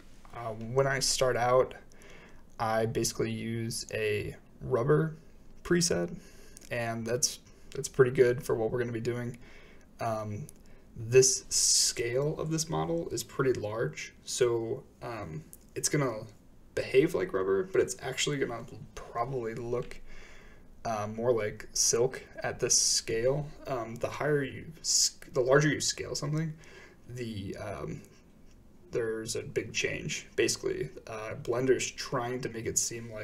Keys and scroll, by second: 14.6 Tab, 17.4 a, 17.6 a, 17.8 a, 18.4 a, 26.6 typing.